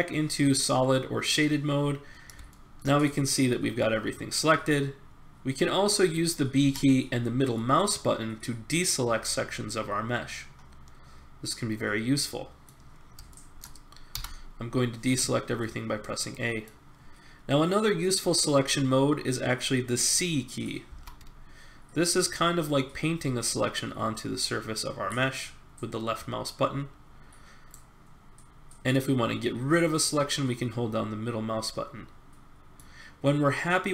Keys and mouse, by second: 1.4-2.5 middle drag, 4.3-5.7 middle drag, 6.6 b, 6.9-9.2 drag, 10.6 middle click, 13.3-16.0 middle drag, 14.1 a, 20.8 c.